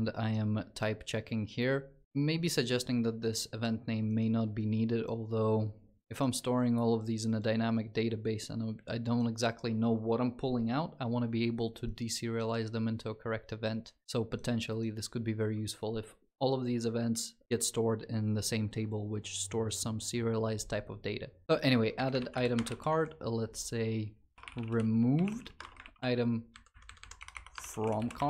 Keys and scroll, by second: 21.9 ctrl+c, 24.3 ctrl+v, 24.3 ctrl+BackSpace, 25.6 ctrl+s, 26.9 ctrl+s, 28.1 Delete, 28.1 ctrl+s.